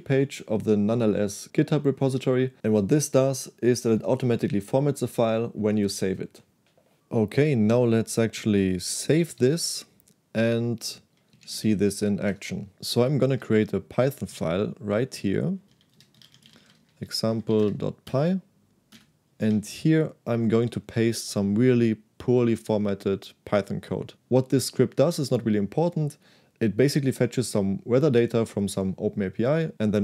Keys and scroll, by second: 9.2 shift+z, 9.3 shift+z, 10.8-12.0 typing, 12.4 Return, 13.3 \, 15.6-18.4 typing, 19.0 Return, 19.5 shift+p.